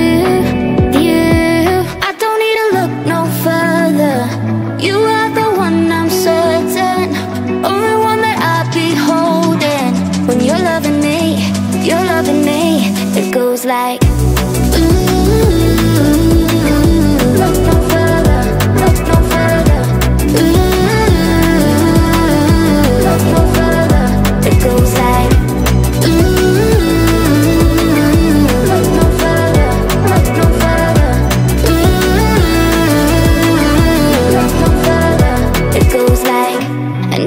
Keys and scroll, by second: 10.1-12.3 typing, 10.6 Caps_Lock, 13.4 y, 26.5-27.6 typing.